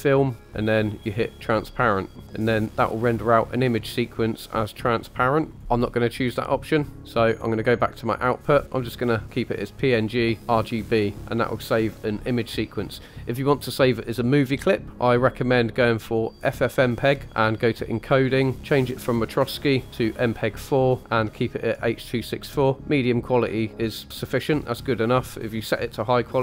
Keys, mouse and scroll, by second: 0.0 click, 1.4 click, 5.6 click, 7.6 click, 10.2 click, 14.9-16.4 drag, 17.0 scroll down 3, 17.8 click, 18.3-19.3 scroll down 3, 19.3-20.3 drag.